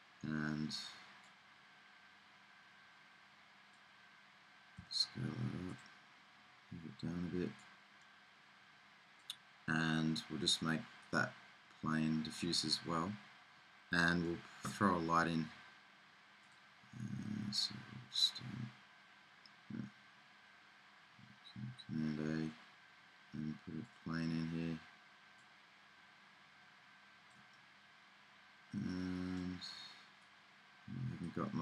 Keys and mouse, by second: 1.3-3.2 drag, 4.9 middle click, 4.9 s, 7.8-9.9 drag, 9.9-11.2 middle drag, 11.2-13.8 drag, 16.6-17.9 drag, 18.4-25.4 middle drag, 22.3 shift+a, 25.4-27.3 drag, 27.3 middle click, 29.6 middle click, 30.4-31.6 drag.